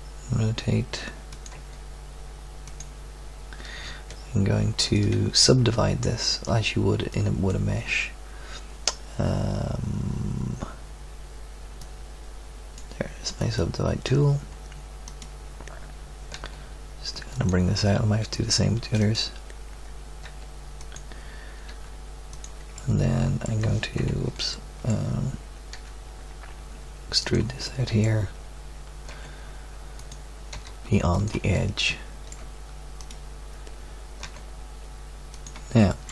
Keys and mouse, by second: 1.5 g, 16.3 g, 19.0 click, 20.2 g, 21.6 r, 24.0 KP_3, 25.7 e, 26.4 middle click, 29.1 g, 29.6 click, 30.5 r, 31.5-34.2 drag, 34.2 g, 34.9-36.1 drag.